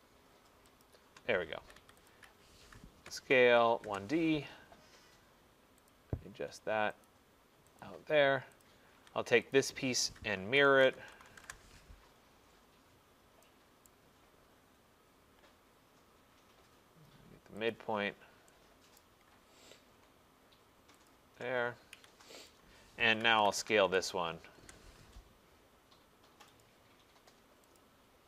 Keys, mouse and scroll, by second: 0.9 shift+click, 1.4-3.9 typing, 2.2 click, 6.0 click, 7.1 click, 7.3-8.4 typing, 7.9 click, 8.7 click, 9.0 Escape, 9.6 click, 10.5-11.5 typing, 12.8-13.6 typing, 12.9 middle click, 13.9 right click, 14.2 middle click, 14.6 middle click, 14.7 middle click, 15.5 middle click, 16.5 middle click, 17.8 click, 18.0 middle click, 18.8 middle click, 19.0 right click, 21.1 shift+click, 22.0 Escape, 22.5 click, 23.1-24.6 typing, 26.7 click, 27.6-28.2 typing, 27.8 click.